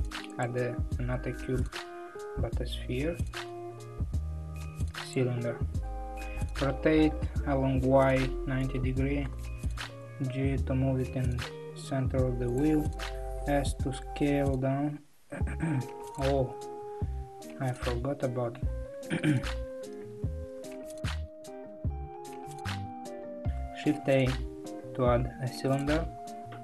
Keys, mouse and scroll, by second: 0.4 shift+a, 2.2 ctrl+z, 5.1 shift+a, 6.7 r, 9.8 g, 13.1 s, 19.4 ctrl+z, 19.7 ctrl+z, 20.2 ctrl+z, 20.6 ctrl+z, 25.8 shift+a.